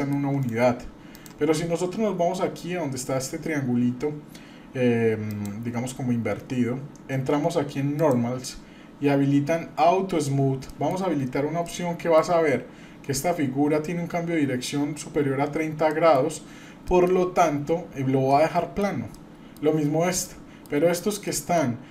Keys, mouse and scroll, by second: 0.4-1.3 right drag, 5.3 click, 8.0 click, 10.7 middle click, 11.2-11.6 scroll up 1, 11.6 middle click, 14.5 scroll up 1, 15.9 middle click, 16.5 scroll down 1, 16.9 middle click, 18.3 middle click, 19.1-19.6 middle drag, 20.2-20.7 middle drag, 21.3 middle drag, 21.8 scroll up 1.